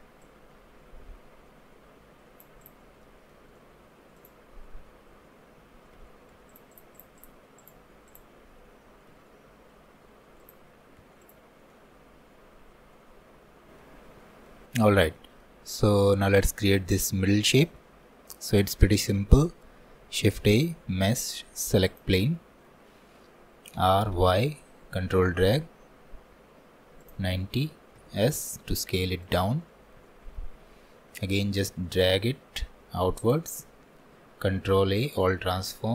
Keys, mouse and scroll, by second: 0.3-3.1 drag, 3.1 alt+middle click, 4.2-9.2 drag, 9.2 s, 11.6 scroll down 1, 11.8-19.4 middle drag, 19.4 shift+a, 29.6-30.1 scroll up 3, 30.1-31.4 shift+middle drag, 31.4-34.4 ctrl+drag, 34.5 ctrl+a.